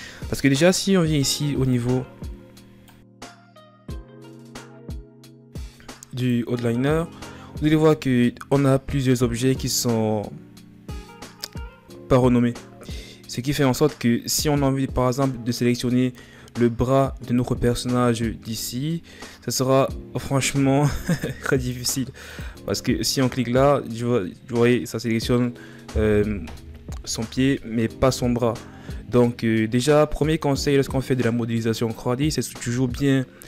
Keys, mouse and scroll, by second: 5.1-7.7 drag, 7.7-8.9 scroll down 11, 18.0-18.3 scroll up 2, 18.6-20.3 scroll up 9, 22.0-25.0 drag, 25.2-26.4 middle drag, 26.4 KP_1.